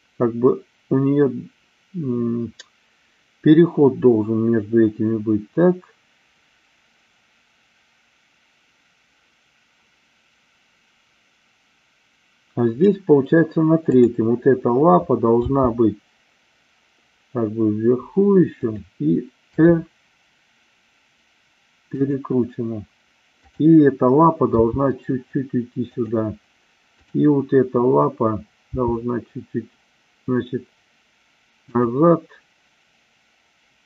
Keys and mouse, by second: 13.8 click, 15.4 g, 19.4 r, 21.9 click, 24.5 g, 25.8 click, 26.9 click, 28.7 g, 31.7 click.